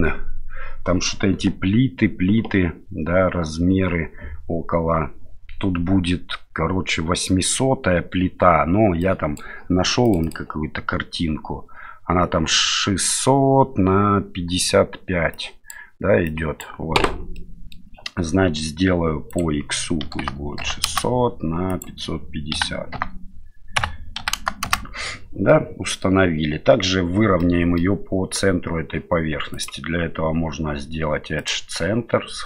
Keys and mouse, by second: 17.3 middle click, 19.3-21.3 drag, 21.7-25.2 drag, 25.5-26.0 middle drag, 27.4-27.8 middle drag, 29.5-31.7 drag.